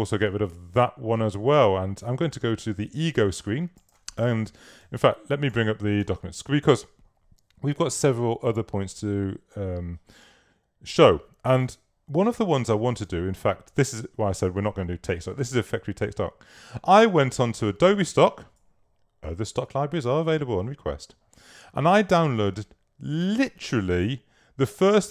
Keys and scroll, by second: 0.3 super+w.